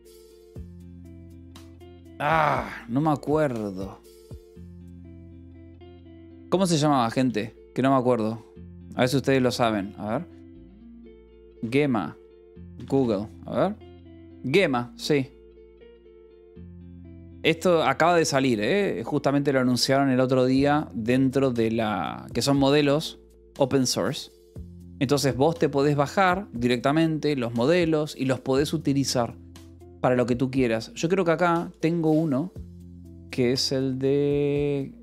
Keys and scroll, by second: 6.1 BackSpace, 7.8 alt+Tab, 10.5-13.0 typing, 25.3 alt+Tab.